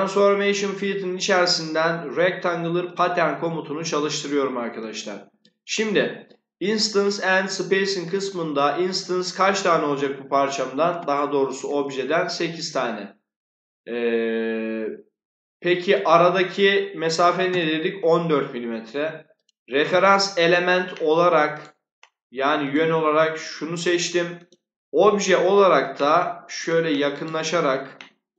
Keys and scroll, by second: 10.8 8, 16.9-17.9 typing.